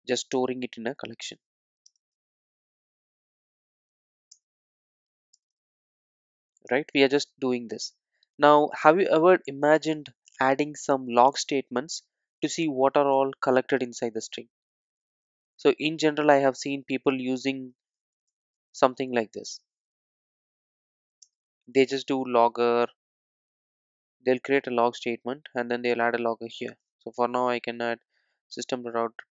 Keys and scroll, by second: 2.4 alt+Return, 4.4 Return, 27.2 Tab, 29.1 Tab.